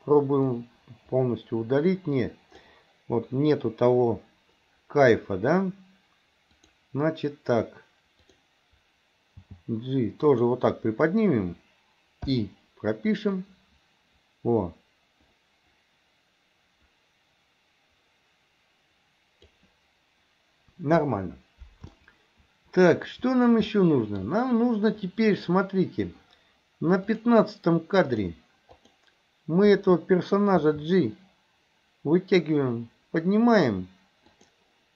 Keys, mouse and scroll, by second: 0.5-2.7 drag, 6.6 click, 8.3 click, 9.5 g, 12.3 i, 13.5-19.6 drag, 22.0-23.1 shift+middle drag, 23.8-24.2 shift+middle drag, 27.2 click, 28.1 click, 30.6 g.